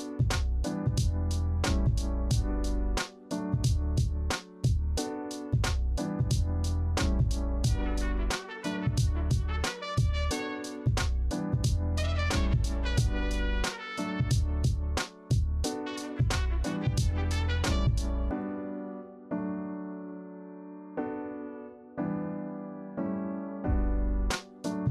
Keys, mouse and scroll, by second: 0.0 alt+scroll up 2, 2.7-3.4 alt+scroll down 1, 3.4 alt+scroll down 2, 3.6-4.3 alt+scroll up 1, 4.3 alt+scroll, 4.8 ctrl+c, 5.0 ctrl+f, 19.3 ctrl+alt+2, 19.9 ctrl+g, 20.4 ctrl+a, 21.0 ctrl+z, 22.0 ctrl+c, 22.1 ctrl+f.